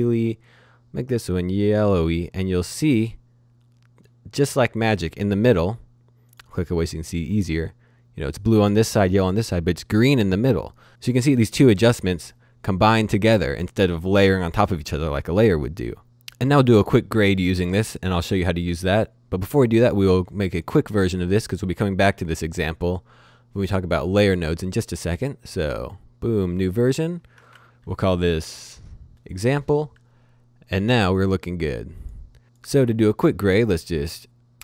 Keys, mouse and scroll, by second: 6.3 click, 20.5 click, 22.8 right click, 25.8 click, 27.3 click, 27.6-29.4 typing, 29.4-30.2 scroll up 1, 31.1 click, 32.4 click, 34.0 click.